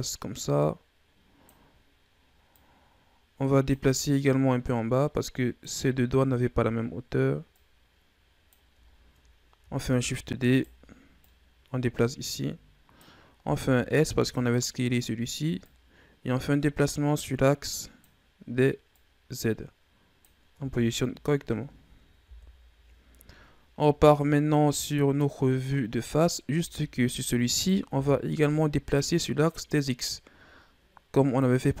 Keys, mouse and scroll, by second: 2.4-7.2 drag, 7.4-8.8 drag, 8.8-9.9 scroll up 4, 9.9 shift+d, 11.1-13.3 drag, 13.3 s, 15.5-18.6 drag, 18.7-20.4 drag, 20.4 Tab, 20.8-22.1 scroll down 5, 22.1 KP_1, 24.4-25.3 middle drag, 25.3-25.9 scroll up 2, 25.9-26.4 middle drag, 26.4 Tab, 27.4 right click, 27.9 l, 28.3-29.3 middle drag, 29.3-31.8 drag.